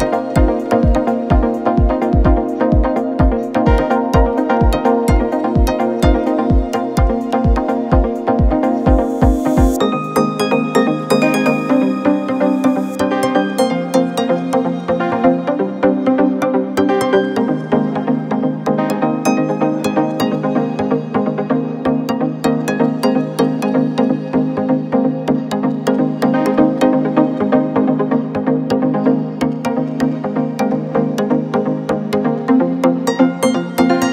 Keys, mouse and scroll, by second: 2.4-4.2 middle drag, 4.2 g, 7.6 click, 8.8-10.5 middle drag, 10.5 drag, 11.6-14.6 drag, 14.7 scroll up 4, 16.8-20.0 shift+drag, 21.6 click, 22.5-24.0 scroll down 1, 24.0-27.1 middle drag, 27.3-29.8 middle drag, 29.8 click, 31.2 Tab, 32.3 click, 33.8-34.1 right drag.